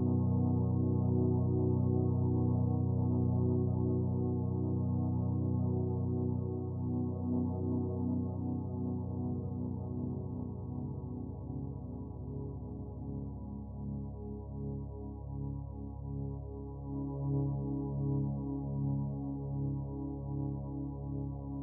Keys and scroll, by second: 1.8 ctrl+u.